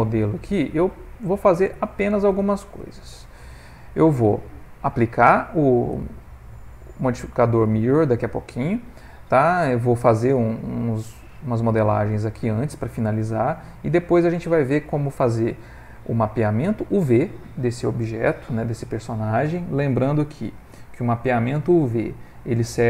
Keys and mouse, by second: 2.4 ctrl+middle click, 3.0 shift+middle click, 3.4 ctrl+middle click, 9.1 middle click, 10.5 shift+middle click, 10.7 shift+middle click, 11.2 middle click, 11.9 middle click, 14.3 middle click.